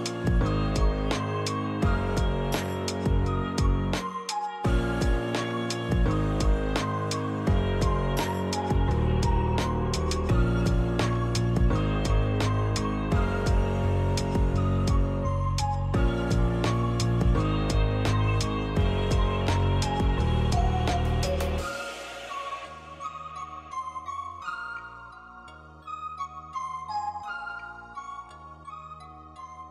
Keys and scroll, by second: 1.6 m, 4.9-5.9 typing, 26.0 a.